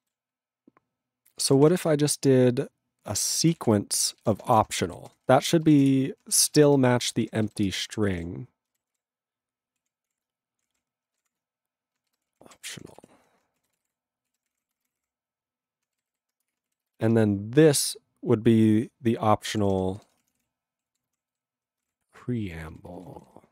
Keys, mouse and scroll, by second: 1.2-2.0 typing, 3.5 ctrl+space, 3.6 ctrl+e, 4.3 ctrl+b, 4.5 (, 5.0 ctrl+alt+b, 5.1 ctrl+f, 5.6 ctrl+b, 5.9 Return, 6.5 ctrl+e, 6.5 ctrl+b, 6.8 Return, 7.3 ctrl+/, 7.5 ctrl+b, 7.7 Return, 8.0 ctrl+p, 8.1 ctrl+o, 8.2 ctrl+a, 8.7 ctrl+n, 8.9 Tab, 9.8 ctrl+p, 10.1 Tab, 10.5-15.5 typing, 13.8 ctrl+space, 13.8 ctrl+g, 16.1 ctrl+r, 16.5 Return, 16.8 ctrl+e, 17.0 ctrl+b, 19.5-22.4 typing, 22.7 ctrl+g, 22.9 ctrl+n, 23.0 ctrl+a, 23.0 ctrl+n, 23.2 ctrl+e, 23.3 ctrl+n.